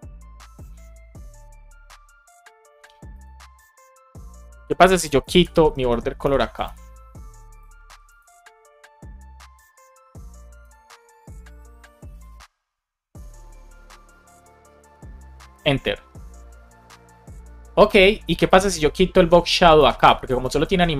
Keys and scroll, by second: 5.2 shift+super+Left, 5.5 BackSpace, 6.5 super+s, 14.2 BackSpace, 15.5 Return, 19.0 Down, 19.4 super+Right, 19.7 shift+super+Left, 20.2 BackSpace, 20.5 super+s.